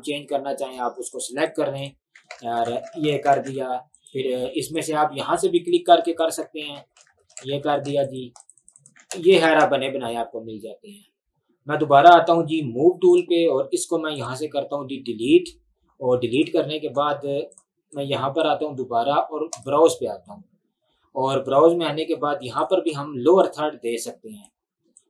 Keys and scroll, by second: 2.4-4.6 typing, 7.7-10.2 typing, 14.4 Delete.